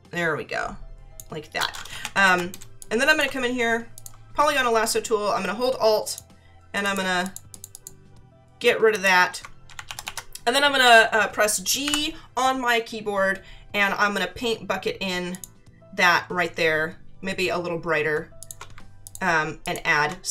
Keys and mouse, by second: 2.0 ctrl+=, 2.6 space, 2.8 click, 3.9 click, 6.1 alt+click, 8.9 alt+click, 11.8 g, 15.3 click, 18.1 space, 18.4 click, 19.1 click.